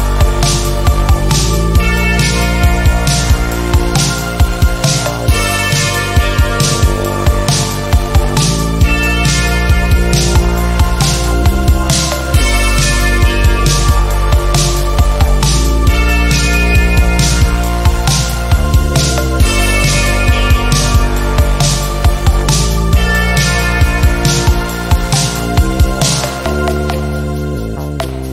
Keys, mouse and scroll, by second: 0.5 click, 5.5-7.3 shift+scroll down 8, 7.3 click, 7.4 click, 8.9 ctrl+z, 9.5 click, 11.1 ctrl+z, 12.1 click, 15.9 click, 17.0 ctrl+z, 17.5 click, 23.3 click, 27.2-28.3 drag.